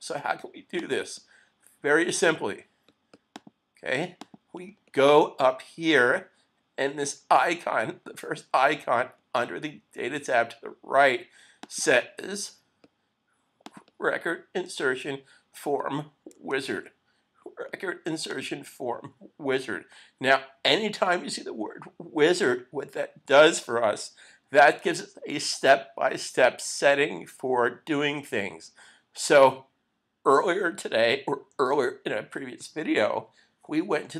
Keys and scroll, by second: 16.7 super+z.